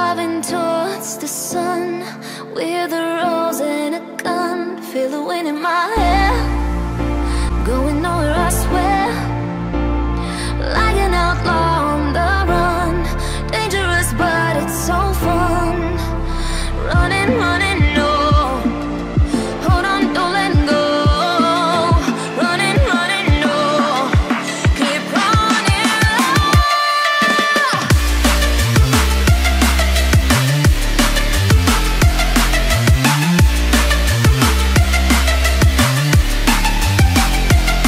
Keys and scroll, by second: 5.2 ctrl+space, 9.3 ctrl+0, 13.3 ctrl+t.